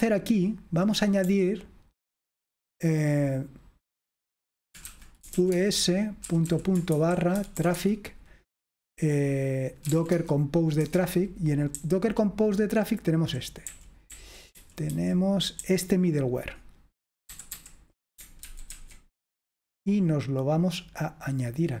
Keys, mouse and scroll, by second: 0.0-0.7 typing, 4.1-8.2 typing, 9.6-15.6 typing, 17.3 typing, 18.5 ctrl+w, 18.7 ctrl+w, 21.3-21.8 typing.